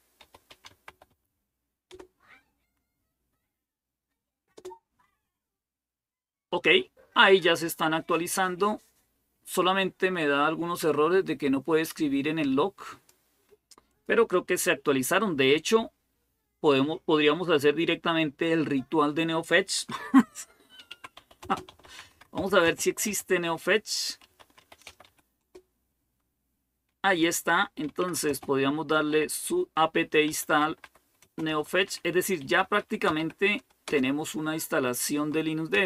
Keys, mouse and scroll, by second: 0.0-1.4 typing, 1.7 Return, 4.4 typing, 12.2 click, 13.2 click, 13.7 click, 20.4-25.3 typing, 27.4-34.2 typing, 35.3-35.8 typing.